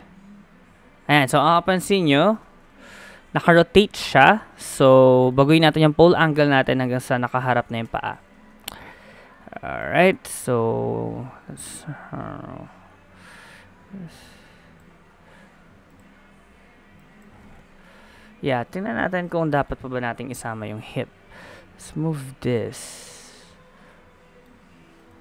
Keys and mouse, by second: 1.6 KP_1, 2.2 a, 2.4 a, 2.6 alt+g, 2.9 alt+r, 2.9 alt+s, 4.0-6.1 drag, 6.2 click, 7.9 KP_1, 15.1 ctrl+z, 18.6 click, 18.7 middle click, 19.4-22.1 drag, 20.0 KP_3, 21.2 g, 23.8 middle click.